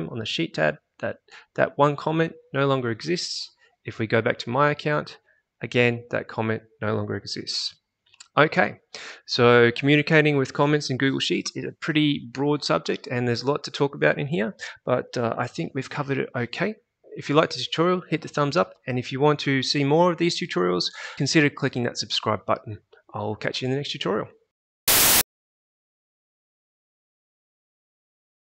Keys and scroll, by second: 4.4 alt+Tab.